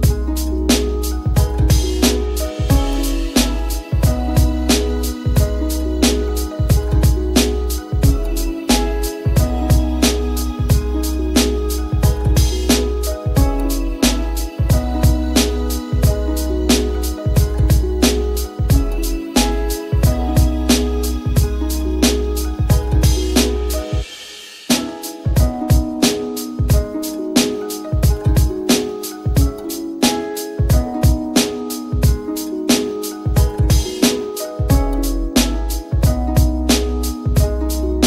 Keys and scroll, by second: 4.3 t.